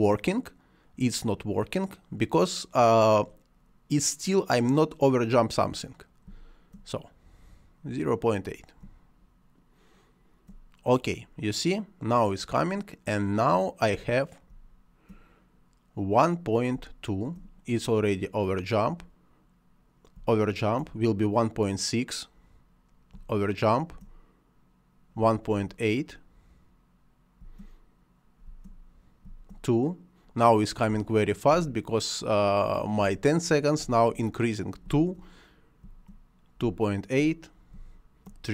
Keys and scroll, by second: 6.1 space, 8.7 space, 14.3 space, 16.6 space, 20.0 space, 23.0 space, 25.1 space, 27.2 space, 30.7 space.